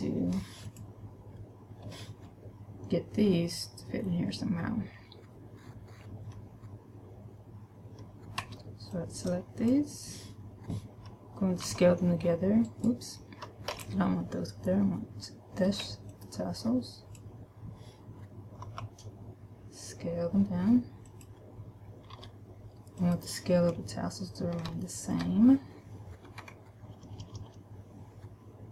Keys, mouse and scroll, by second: 1.0 click, 8.8 b, 12.1 s, 13.3 right click, 14.1 a, 16.1 b, 19.1 s, 21.7 click, 22.7 g, 23.6 click, 25.2 shift+middle click, 26.8 KP_Subtract, 27.4 KP_Add, 27.8 KP_Add.